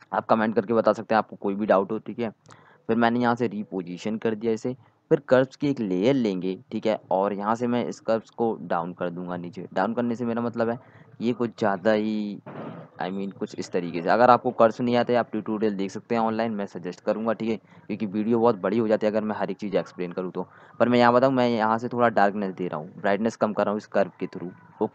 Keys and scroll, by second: 1.0 ctrl+t.